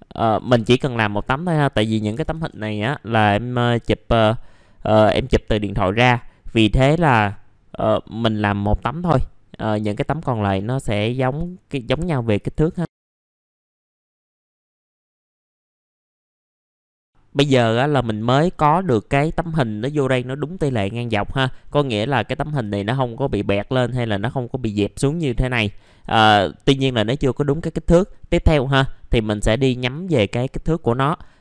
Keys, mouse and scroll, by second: 1.2 click, 4.3 middle click, 6.8-14.4 drag, 14.4 middle click, 14.9 click, 15.8 middle click, 16.0 click, 16.1 middle click, 16.2 Delete, 16.5 scroll up 1, 16.7 middle click, 21.6-21.9 scroll up 1, 21.9 click, 22.4 middle click, 23.2-25.5 drag, 26.2 middle click, 28.2 scroll up 1, 28.8 middle click, 29.3-29.9 scroll down 1, 29.9 click, 31.2-31.4 scroll up 1.